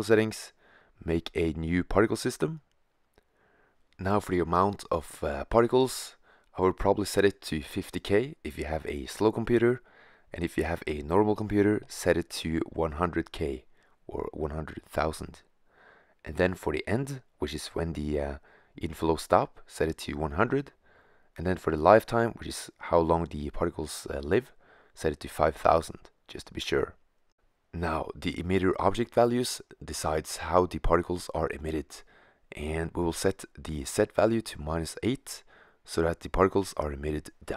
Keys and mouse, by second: 1.3-2.3 drag, 4.4-6.3 drag, 7.4 0, 9.7 BackSpace, 9.9 BackSpace, 10.3 BackSpace, 12.7 0, 17.0-18.9 drag, 18.3 0, 21.7 0, 21.9 0, 25.4 middle click.